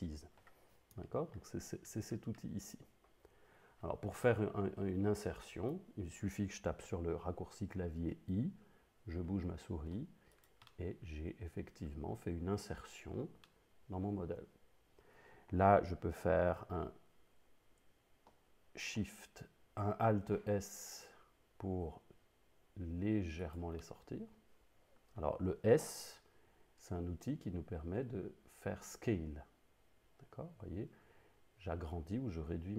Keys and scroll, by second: 8.0 i, 20.2 alt+s, 26.1 s.